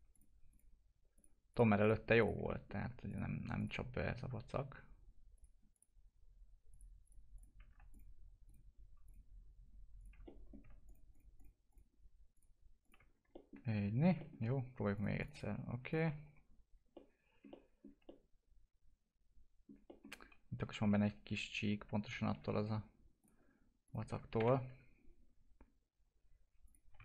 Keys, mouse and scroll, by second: 2.4 middle click, 3.0 ctrl+click, 10.2 middle click, 10.8 ctrl+click, 13.0 scroll down 1, 13.3 alt+middle click, 13.8 scroll up 1, 14.1 alt+middle click, 14.9 click, 16.2 F4, 16.9 alt+middle click, 17.4 middle click, 18.0-19.8 alt+middle drag, 19.8 middle click, 20.2-20.6 scroll up 1, 20.8 F4, 23.1 click, 24.3 ctrl+BackSpace, 26.6 click.